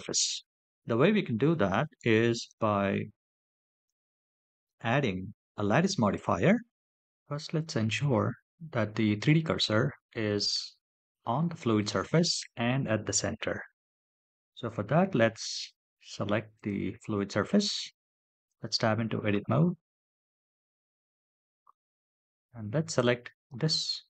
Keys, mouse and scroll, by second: 0.9 scroll down 1, 2.1 click, 3.6 shift+a, 13.7 KP_7, 16.3 click, 18.2 Tab, 19.0-20.5 scroll up 7, 19.1 middle click, 19.9-21.1 middle drag, 21.4-22.7 scroll up 4, 22.7 click.